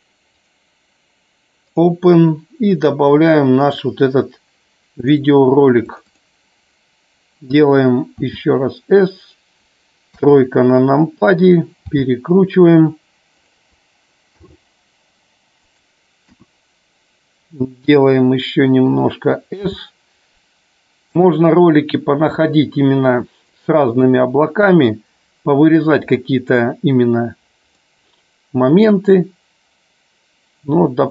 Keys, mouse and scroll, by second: 0.4 click, 1.8 click, 9.2 click, 10.1 KP_3, 11.9 r, 13.5 click, 14.5 g, 15.7 click, 16.2 KP_1, 22.4-24.1 drag, 24.9 click, 27.7-31.1 drag.